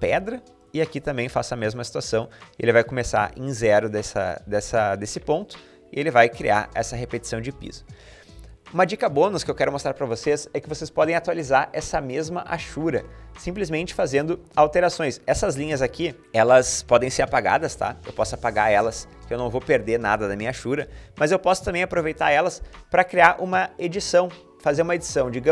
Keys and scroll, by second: 8.2 Escape, 16.2 Escape, 18.0 Delete, 20.7 ctrl+z.